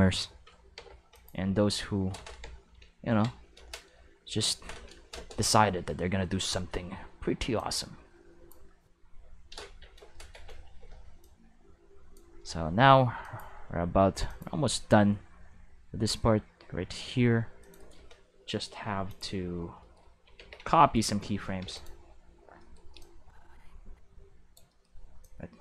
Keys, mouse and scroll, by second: 0.7 x, 1.1 click, 3.0 ctrl+v, 7.5-8.4 drag, 10.6 c, 11.2-12.1 drag, 13.2 click, 14.2 click, 16.4-17.6 middle drag, 17.6 click, 17.8 right click, 18.7 x, 19.0 click, 20.3 ctrl+s, 20.9 right click, 21.6 x, 21.7 click, 23.0-24.5 drag, 25.2-25.6 drag.